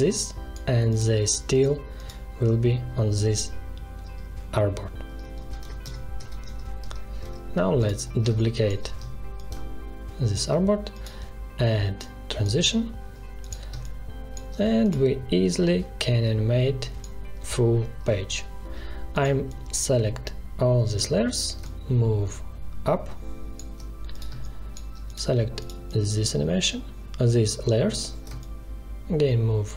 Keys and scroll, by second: 5.3 ctrl+z, 8.3 space, 13.7 space, 24.2 space.